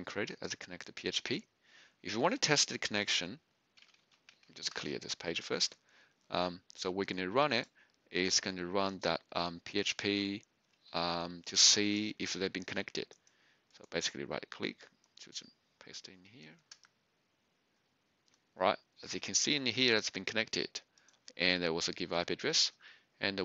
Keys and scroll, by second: 3.8-5.2 typing, 12.5 ctrl+c, 16.7 Return.